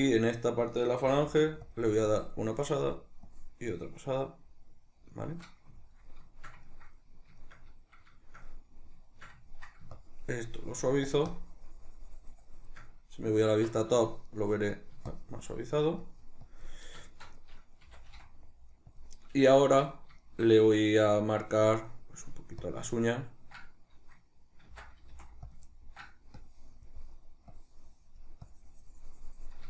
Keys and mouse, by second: 1.0 shift+c, 2.1-3.9 drag, 3.9-10.0 middle drag, 10.0-14.0 shift+drag, 13.5 alt+q, 14.0-15.1 shift+middle drag, 15.1-17.1 shift+drag, 17.1-19.0 shift+middle drag, 17.9 c, 19.0 click, 19.5-22.7 shift+middle drag, 22.7-25.5 ctrl+drag, 24.7 ctrl+z, 25.7 ctrl+middle click, 26.4-29.6 drag.